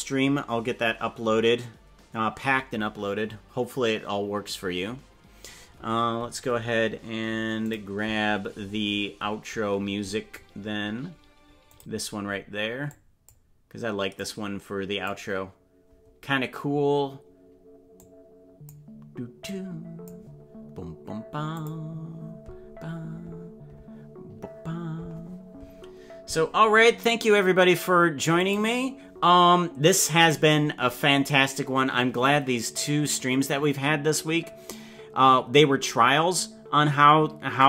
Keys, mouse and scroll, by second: 1.2 ctrl+s.